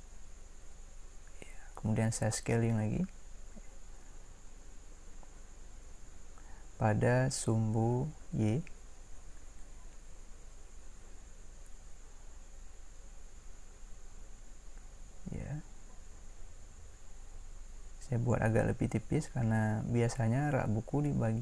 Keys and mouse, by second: 8.2 s.